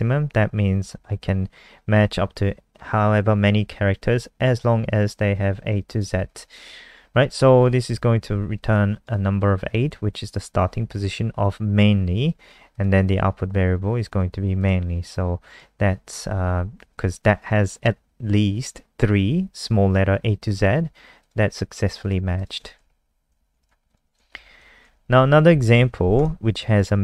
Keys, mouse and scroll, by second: 7.6 ctrl+s, 7.8 F5, 8.7 alt+click, 12.7 click, 21.5-22.0 scroll down 1, 22.0 click, 22.3 click, 22.9 shift+Home, 23.1 shift+Home, 23.2 shift+Up, 23.6 ctrl+c, 25.5 shift+Up, 25.7 shift+Tab, 26.1 click.